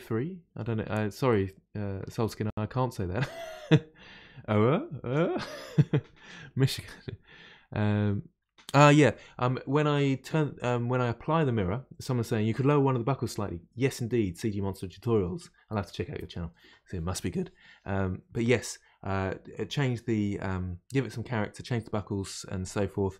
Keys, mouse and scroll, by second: 22.6-23.1 middle drag.